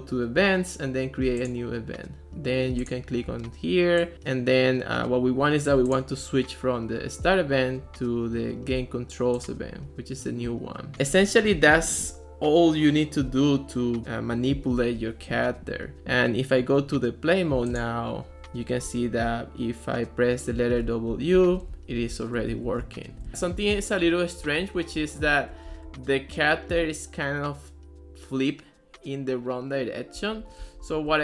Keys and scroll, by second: 20.9-25.0 typing, 30.4 d, 30.7 s.